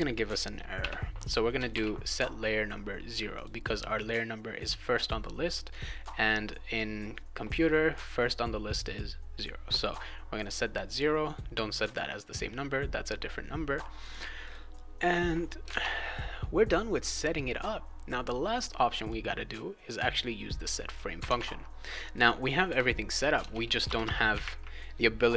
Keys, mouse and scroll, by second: 0.8 0, 1.7 ctrl+s, 3.3 click, 14.0 click, 14.4 click, 15.6 alt+Tab, 19.1-20.9 drag, 21.2 alt+Tab, 22.0 click, 22.7 ', 23.4 BackSpace, 23.6 Return, 23.8 Return, 24.0 Return.